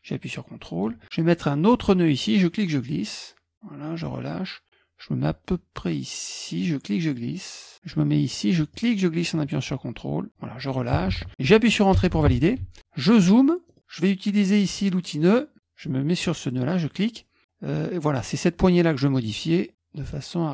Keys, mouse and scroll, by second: 2.4-4.3 drag, 6.6-10.4 drag, 12.0 Return, 13.2-15.2 middle drag, 15.2 click, 16.5 click, 19.2-20.5 drag.